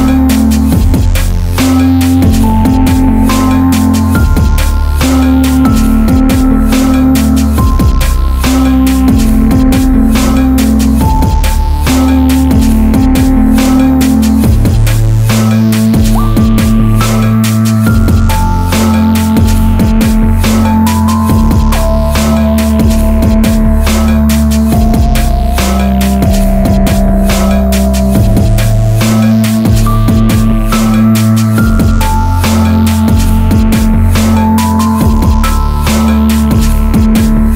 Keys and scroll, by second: 3.0 Return, 9.6 space, 11.7 ctrl+z, 18.6 ctrl+z, 19.3 ctrl+alt+z.